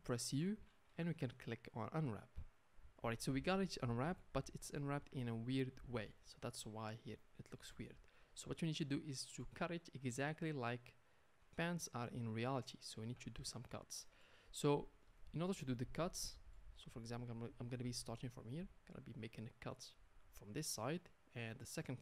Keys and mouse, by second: 0.3 u, 5.4 Tab, 13.1 Tab, 15.2-19.7 shift+middle drag, 19.7-22.0 drag.